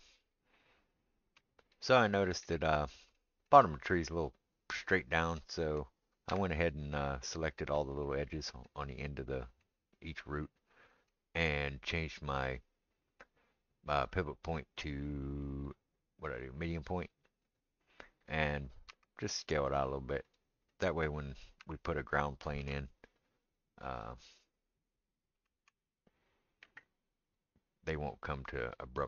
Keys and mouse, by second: 0.2 right click, 0.4-18.7 middle drag, 6.3 Tab, 12.4-20.4 drag, 18.9 s, 20.4-29.0 middle drag, 21.6 Tab, 24.1 shift+a, 25.4 s.